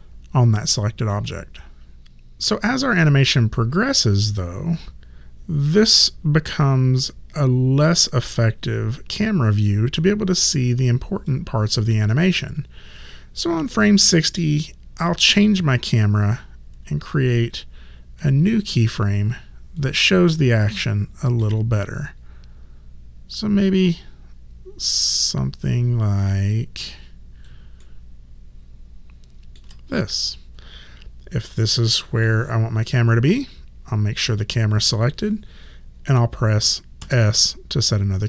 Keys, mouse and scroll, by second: 2.7 click, 17.2 alt+click, 18.9 alt+right click, 20.1 alt+middle click, 21.8 alt+right click, 26.5 alt+click, 27.8 alt+middle click, 34.2 click, 37.0 s.